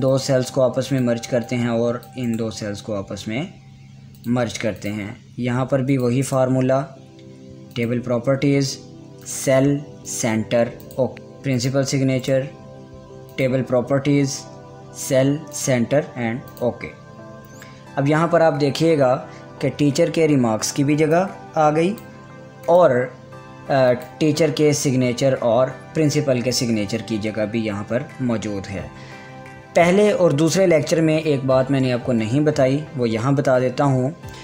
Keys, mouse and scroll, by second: 0.6 click, 2.9 right click, 4.7 click, 6.8 right click, 8.3 click, 11.1 right click, 11.5 click, 12.8 right click, 13.9 click, 21.7-23.3 drag.